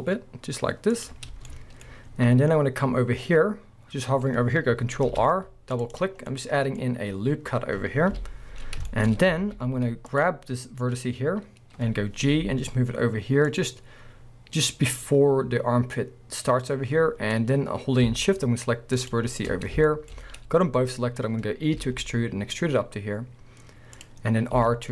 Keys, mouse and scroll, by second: 1.1 click, 1.4 shift+middle click, 5.1 ctrl+r, 6.0 click, 6.2 scroll down 1, 6.3 middle click, 7.6-8.1 scroll down 1, 8.1 KP_1, 8.9 shift+middle click, 9.0 scroll up 1, 9.4 alt+a, 10.1 click, 12.3 g, 13.6 click, 14.1 scroll up 1, 18.9 shift+click, 19.6-19.9 scroll down 1, 19.9 shift+middle click, 21.8-24.0 middle drag, 21.8 e, 24.0 click, 24.5 e.